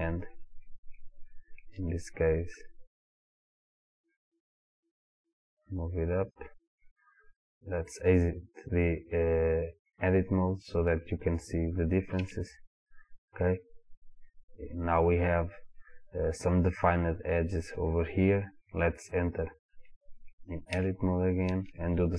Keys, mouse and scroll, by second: 6.4 click, 12.5 Tab, 21.0 Tab, 21.8 shift+middle click.